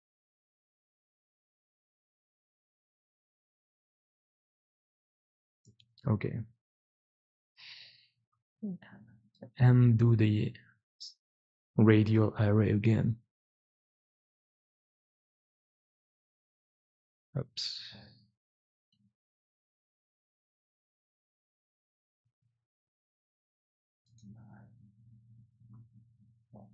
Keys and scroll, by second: 7.7 2, 8.8 4, 16.5 ctrl+z, 20.8 q, 22.2 q.